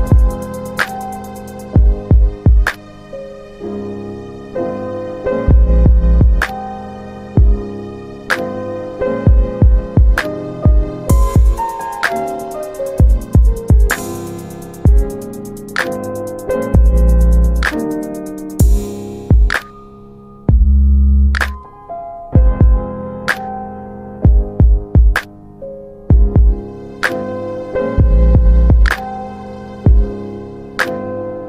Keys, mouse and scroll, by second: 0.2 Return, 1.8 click, 3.4 shift+click, 5.9 click, 6.3 click, 7.7 click, 8.9 alt+middle click, 9.5 click, 12.2 double click, 14.0 w, 15.6 click, 16.3 alt+middle click, 17.1 click, 19.4 click, 22.3 middle click, 23.8 click, 26.6 r, 28.7 shift+click.